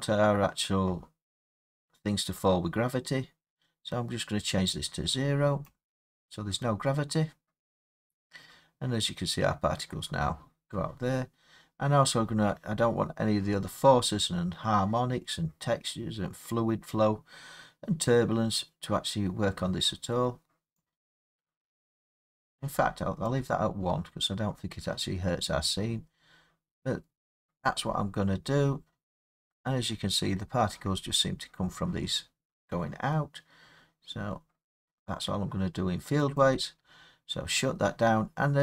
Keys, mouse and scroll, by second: 5.6 click, 12.7 middle click, 12.8 middle click, 14.1 middle click, 14.2 scroll down 5, 19.1 scroll down 1, 23.2 click, 24.1 middle click, 24.2 middle click, 27.1 middle click, 27.3 middle click, 27.6-28.0 scroll, 30.2 scroll, 36.4 click.